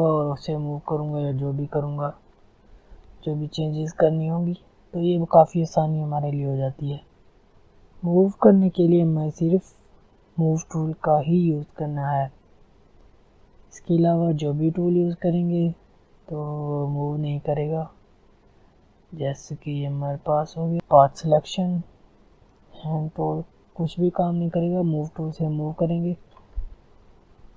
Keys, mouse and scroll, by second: 2.1 ctrl+z, 7.5 alt+scroll up 1, 7.7 click, 12.2-20.7 drag, 22.3-27.5 drag.